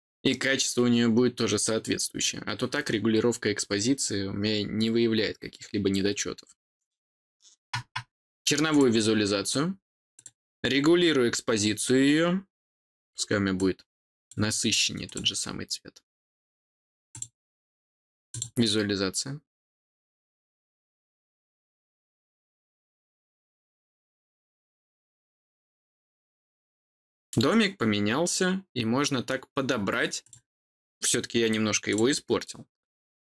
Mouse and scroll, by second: 8.7 click, 10.1 click, 13.5 click, 15.0 click, 17.1 click, 18.3 click, 30.2 click, 31.8 click.